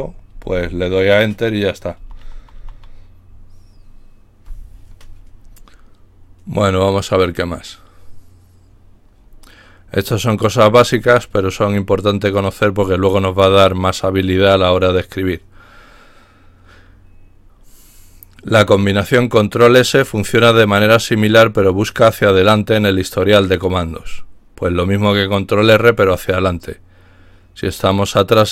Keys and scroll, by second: 0.0-0.6 typing, 2.0 Down, 2.2 Down, 2.4 Down, 2.6 typing.